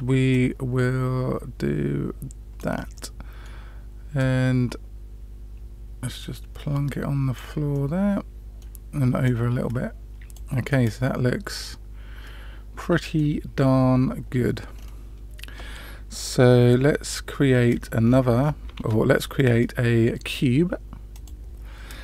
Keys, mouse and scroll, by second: 0.3-2.6 drag, 2.9-3.4 middle drag, 4.1-7.3 drag, 7.7-8.6 middle drag, 9.2-10.3 drag, 10.6-13.1 middle drag, 14.7 scroll down 2, 17.6 scroll up 1, 17.7-18.1 scroll down 2, 18.1 scroll up 1, 18.4 scroll down 1, 18.7 shift+a.